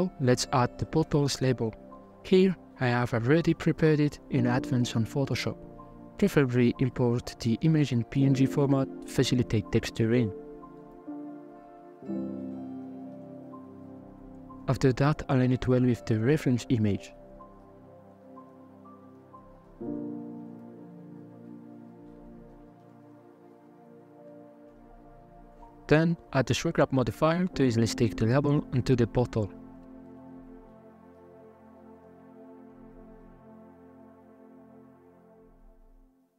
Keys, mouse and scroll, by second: 0.4 a, 4.7 r, 7.1 s, 8.2 g, 9.7 shift+Right, 10.4 m, 11.5 t, 13.1-14.1 drag, 14.5 s, 18.0 g, 19.3 scroll up 3, 19.6 g, 20.6 scroll down 4, 21.0-21.7 middle drag, 21.7 g, 22.9 h, 23.2 right click, 23.6-25.4 middle drag, 25.4 click, 27.1 click, 28.3-30.1 middle drag, 30.1 shift+click, 30.3 middle click, 30.9 scroll up 1, 31.8 middle click, 32.3 g, 35.3 Tab, 35.5 middle click.